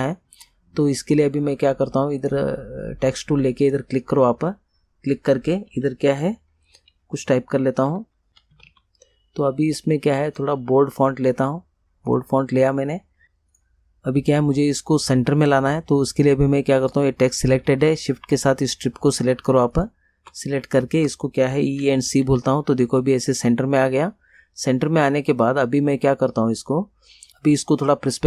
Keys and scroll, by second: 7.8-9.3 typing, 21.9 e, 22.3 c.